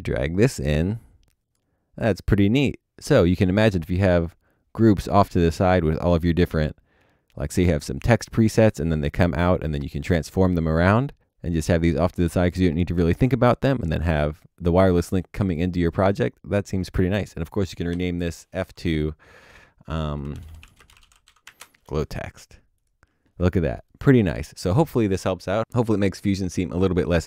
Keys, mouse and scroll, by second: 17.9 click, 18.0 F2, 20.1-21.9 typing.